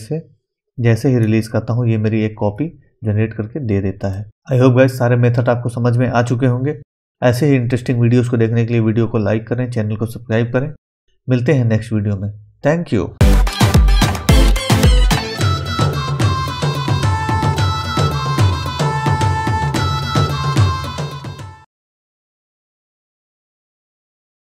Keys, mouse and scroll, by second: 3.5 scroll down 1, 4.1 middle click.